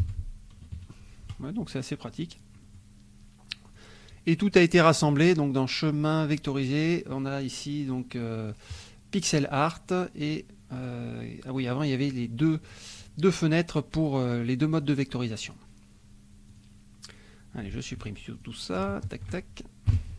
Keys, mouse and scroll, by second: 0.1 F1, 0.6 KP_Subtract, 1.8 middle click, 2.7 middle click, 3.6 click, 4.9 click, 6.2 click, 8.0 click, 8.3-8.7 scroll down 1, 9.2 click, 10.2 click, 10.7 click, 11.5 click, 12.8 click, 13.0 click, 14.1-15.0 drag, 15.5 click, 16.5 click, 17.5 click, 18.4 click, 19.1 shift+click, 19.9 Delete.